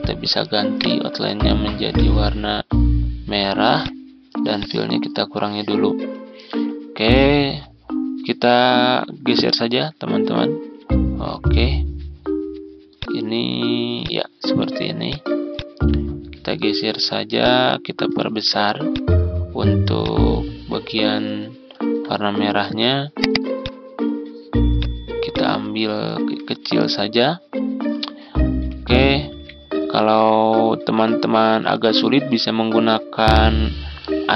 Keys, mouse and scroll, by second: 0.6 right click, 1.8 click, 7.1 Down, 7.2 Down, 7.4 Down, 8.7 ctrl+z, 9.3 Down, 9.5 Down, 9.7 Down, 10.0 Down, 10.5 ctrl+z, 12.8-17.2 drag, 18.2 ctrl+z, 18.7-23.3 drag, 26.4 ctrl+scroll up 1, 30.1-32.9 drag.